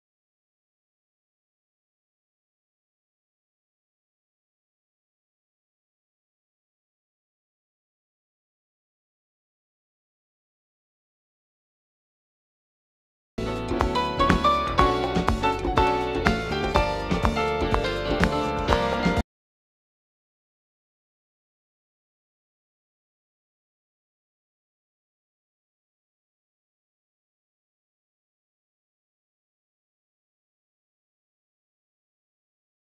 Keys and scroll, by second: 32.1 u.